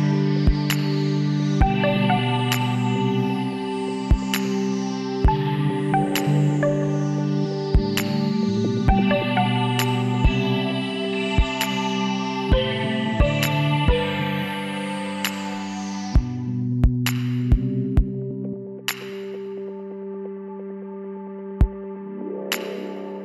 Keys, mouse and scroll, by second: 0.3 middle click, 0.6-2.2 drag, 3.0 middle click, 3.6 KP_1, 4.1-6.1 middle drag, 5.7 shift+d, 7.3-11.5 drag, 14.2-16.7 middle drag, 16.7-18.6 drag, 21.4-23.1 middle drag, 23.1 Tab.